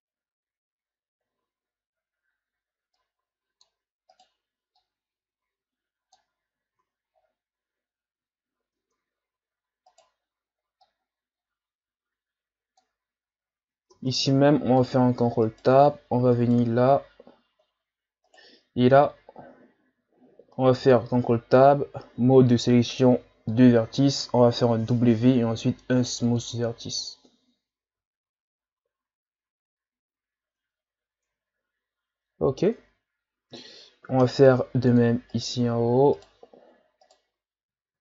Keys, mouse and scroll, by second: 0.8-1.3 scroll up 5, 1.3 Tab, 2.9-4.1 drag, 4.1 right click, 4.8-6.8 drag, 6.8 Tab, 7.1-8.2 scroll down 4, 8.3-8.8 scroll up 6, 8.8 Tab, 9.9 right click, 10.8-13.8 drag, 13.9 ctrl+Tab, 15.5 right click, 16.3 shift+right click, 18.3 shift+right click, 19.6-20.1 scroll down 4, 20.7 ctrl+Tab, 24.8 w, 27.0 Tab, 27.7-28.2 scroll down 4, 29.0-29.5 scroll up 5, 30.6 Tab, 31.0 Tab, 32.4-32.8 scroll up 2, 32.8 Tab, 34.2 ctrl+Tab, 35.3 right click, 36.2 shift+right click, 37.1 shift+right click.